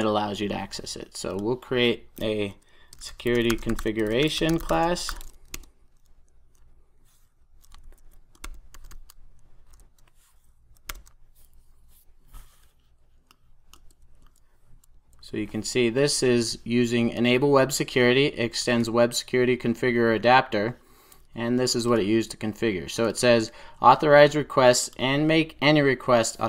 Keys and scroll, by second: 9.6 super+j, 10.8 Return.